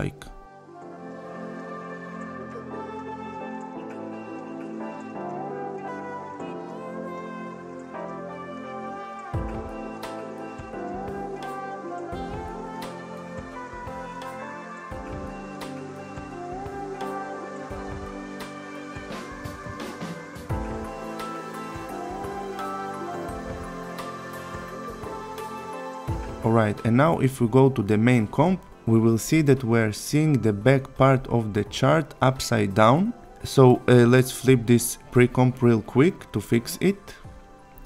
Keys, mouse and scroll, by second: 0.0-1.0 click, 1.3 s, 1.7 click, 2.1 Return, 2.7 click, 3.9 click, 5.0 click, 5.2 click, 6.8 click, 7.2-9.0 typing, 9.5-9.9 click, 11.8 click, 13.7 click, 15.3 click, 16.4 click, 17.5 click, 20.3 ctrl+c, 20.6 click, 21.5-22.0 click, 22.3 v, 22.3 ctrl+a, 22.7-23.1 click, 24.3 click, 27.3 click, 29.3-33.7 click, 35.7 right click.